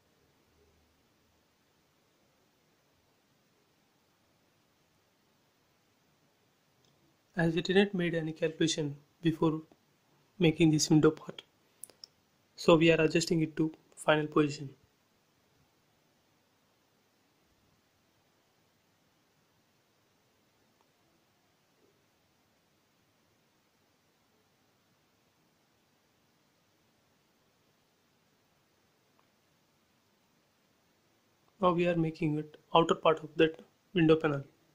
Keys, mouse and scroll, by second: 0.0 shift+m, 0.7 shift+click, 2.0 shift+Left, 2.6 shift+click, 5.1 shift+Left, 7.0 shift+2, 8.0 shift+c, 9.1 shift+BackSpace, 10.2 shift+1, 10.7 shift+', 10.8 Return, 11.2 space, 11.5 middle click, 11.9 scroll down 1, 14.6 click, 15.1 middle click, 15.7 scroll up 1, 16.0 middle click, 16.7 scroll up 1, 17.0 middle click, 17.8 scroll up 1, 18.6-20.4 middle drag, 20.9 scroll up 1, 21.6 click, 22.0 scroll up 1, 22.3 middle click, 23.1 click, 23.8 scroll up 1, 25.3 scroll down 1, 28.4 click, 29.0 scroll up 1, 30.5 middle click, 30.9 scroll down 1, 32.1 r, 33.3 click.